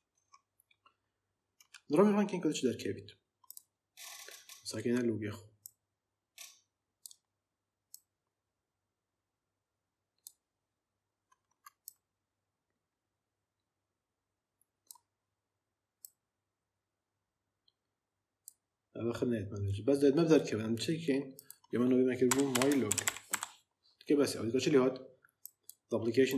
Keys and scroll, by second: 21.9-23.4 typing.